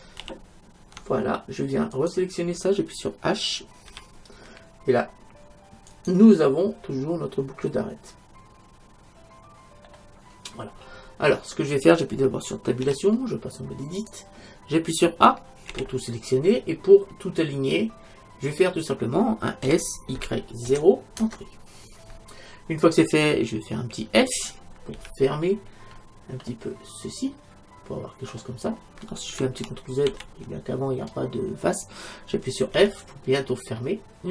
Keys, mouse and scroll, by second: 0.3 ctrl+z, 2.0-3.7 right drag, 3.9 h, 5.9-7.7 right drag, 7.7-9.7 middle drag, 10.7-12.8 middle drag, 12.8 Tab, 15.7 a, 16.5-21.2 middle drag, 19.7 s, 24.9 f, 25.9-28.1 middle drag, 30.1 ctrl+super+z, 32.8 f, 33.8-34.3 middle drag.